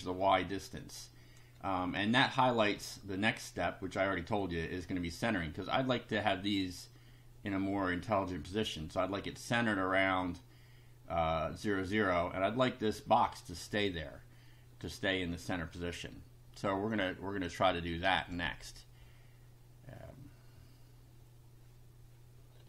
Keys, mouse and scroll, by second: 0.9 click, 2.0-3.1 shift+drag, 16.9 click, 18.2 click.